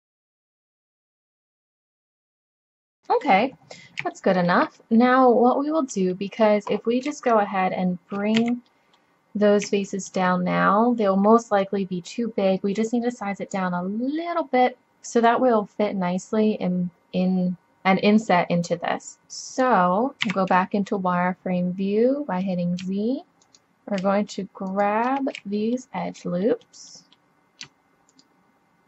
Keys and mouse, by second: 0.0 click, 0.5 KP_7, 0.6 s, 1.8 click, 2.0 KP_7, 2.2 g, 2.9-4.2 middle drag, 5.5 click, 8.4 z, 11.6 click, 20.3 z, 22.8 middle click, 23.8 click, 25.6-26.8 middle drag, 27.1 middle click, 27.9-28.8 drag.